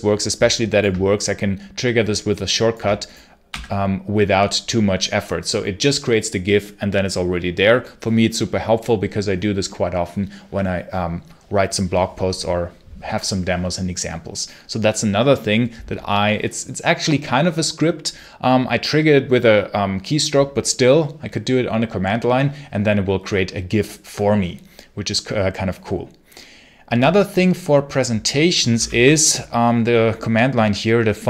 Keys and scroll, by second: 3.4 q, 28.6 ctrl+l.